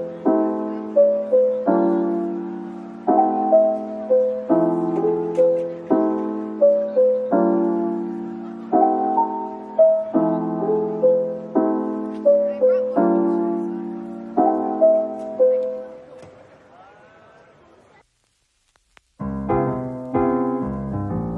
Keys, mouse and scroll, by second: 0.6-1.3 scroll down 1, 2.5 double click, 13.0 scroll up 1, 16.5 shift+click, 16.9 shift+click, 17.6 scroll down 1, 18.6 scroll up 1.